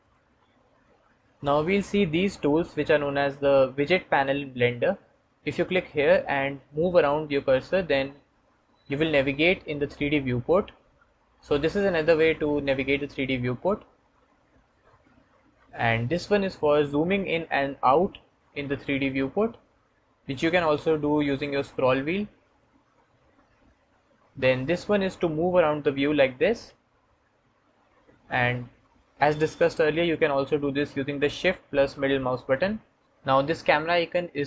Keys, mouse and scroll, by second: 4.0 w, 6.1 middle click, 6.4-8.0 middle drag, 10.2-13.1 middle drag, 13.1 click, 16.8-18.1 middle drag, 18.1 click, 19.0 middle click, 19.5 click, 20.3 middle click, 25.1-28.2 middle drag, 28.2 click, 28.6 middle click, 28.8 click, 29.3 middle click, 31.6-34.4 shift+drag.